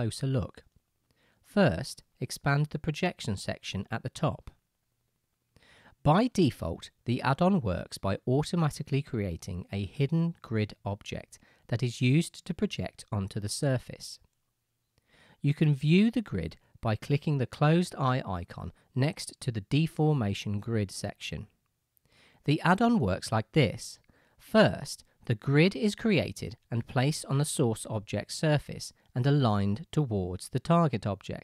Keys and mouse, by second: 22.1-31.4 right drag.